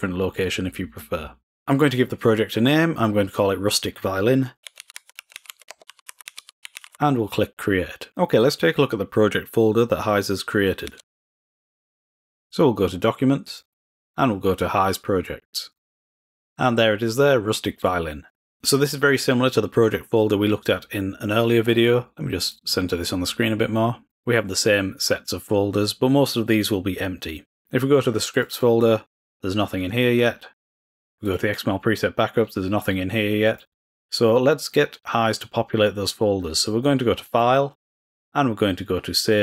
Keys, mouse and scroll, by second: 10.9 super+e, 12.1-13.5 drag, 13.8-16.1 drag, 16.2 click, 18.2 click, 22.4-24.1 drag, 28.3 click, 31.0 click, 33.4-34.9 drag, 37.2-39.4 drag.